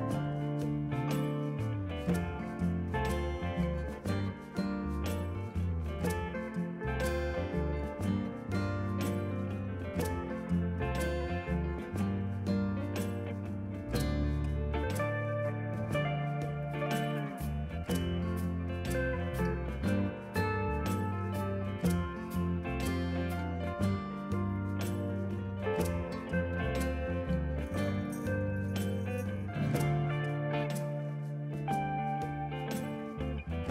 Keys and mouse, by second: 0.6 a, 0.7 click, 3.0 click, 3.2 ctrl+click, 3.6 ctrl+click, 4.0 ctrl+click, 4.6 click, 4.9 3, 5.1 click, 5.1 3, 5.6 BackSpace, 5.7 Return, 5.8 click, 6.0 0, 6.1 Return, 8.8 click, 9.3 ctrl+d, 9.9 ctrl+1, 10.0 click, 10.7 1, 10.8 Return, 11.1 ctrl+click, 11.7 ctrl+click, 12.0 ctrl+click, 12.6 Return, 12.8 s, 13.3 ctrl+click, 15.1 ctrl+1, 16.9 right click, 17.2 click, 21.3 Escape, 22.0 click, 22.3 ctrl+shift+x, 22.4 click, 22.7 Left, 23.0 click, 23.7 ctrl+1, 23.8 click, 23.9 ctrl+shift+x, 24.1 click, 24.3 Left, 24.6 click, 25.5 Escape, 25.6 click, 26.5 click, 26.7 s, 27.0 ctrl+1, 27.0 click, 27.2 ctrl+shift+x, 27.3 click, 27.5 Escape, 27.9 click, 28.2 Right, 28.4 click, 28.7 Escape, 28.8 click, 29.1 click, 29.2 ctrl+shift+x, 29.5 click, 29.8 Right, 29.9 Left, 30.1 click, 30.5 Escape, 30.6 click, 30.8 Escape, 30.9 click, 31.6 Right, 32.2 Left, 32.6 click.